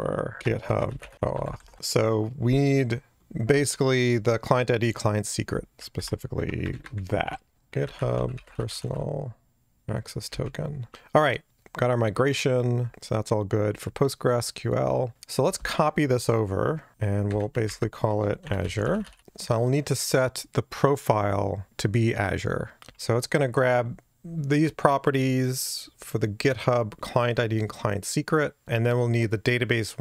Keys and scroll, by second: 7.5 shift+super+f, 16.9 F5, 17.6 alt+shift+Left.